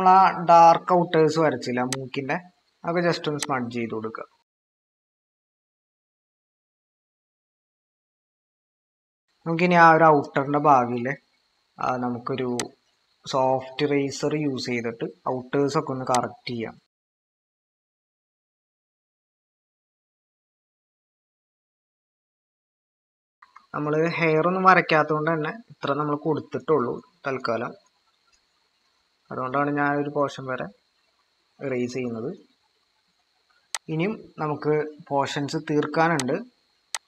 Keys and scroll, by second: 2.6 ctrl+=, 4.3 typing, 17.2-17.6 typing, 22.9-23.5 typing.